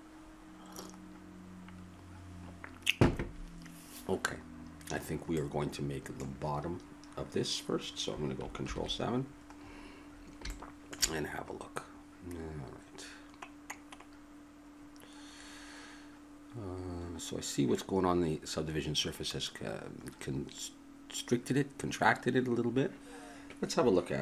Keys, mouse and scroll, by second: 5.4 middle click, 13.3-24.2 middle drag.